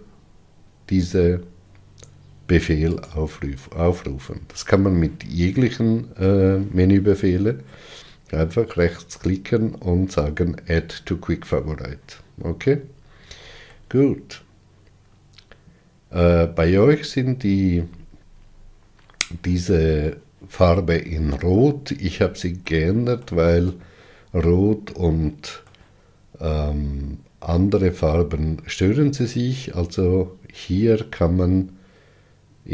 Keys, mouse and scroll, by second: 12.7-13.5 scroll down 5, 13.6-16.8 middle drag, 17.3-18.3 scroll up 6, 22.6-26.6 shift+middle drag.